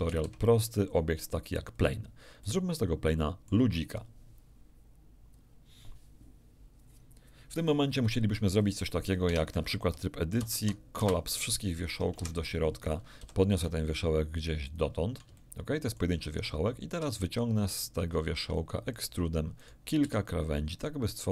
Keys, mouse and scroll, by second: 0.0 shift+a, 1.7 click, 2.4-3.6 middle drag, 9.2 Tab, 10.4 alt+m, 11.0 Return, 13.2 g, 14.6 ctrl+click, 15.3 ctrl+shift+middle click, 17.0 e, 18.9 ctrl+click, 19.6 ctrl+right click, 20.0 ctrl+e.